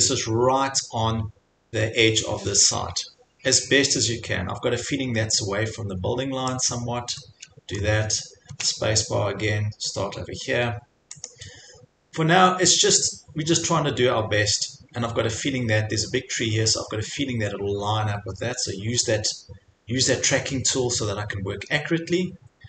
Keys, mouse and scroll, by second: 0.0 click, 6.7 click, 7.9-8.5 scroll, 11.3 click, 20.3 click, 21.3 scroll.